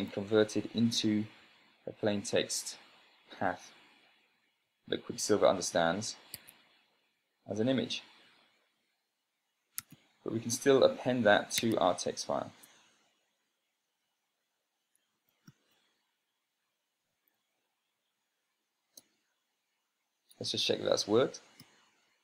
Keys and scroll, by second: 6.8 Tab, 10.0-10.8 typing, 12.0 Tab, 15.2-16.4 typing, 17.7 Down, 19.4 Return, 21.8 ctrl+p.